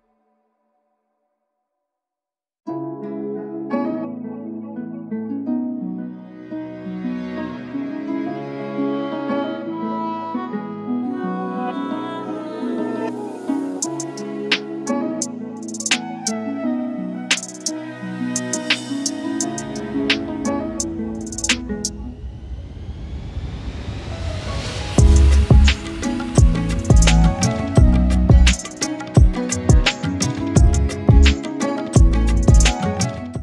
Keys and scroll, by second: 0.4 shift+Return, 7.1 ctrl+z, 8.4 shift+Return, 10.6 shift+Return, 18.8 ctrl+j.